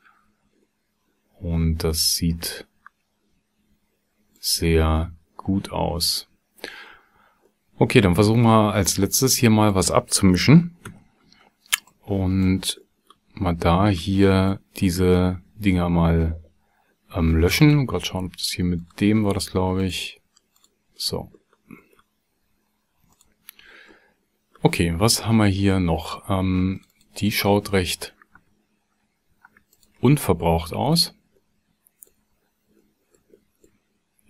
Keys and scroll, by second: 10.9 x.